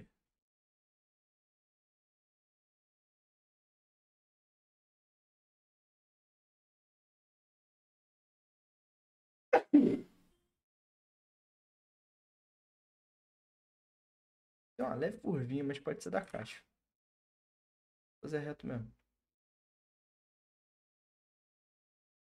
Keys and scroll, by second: 11.9 ctrl+z, 12.9 ctrl+z, 16.2 ctrl+z, 20.7 ctrl+z.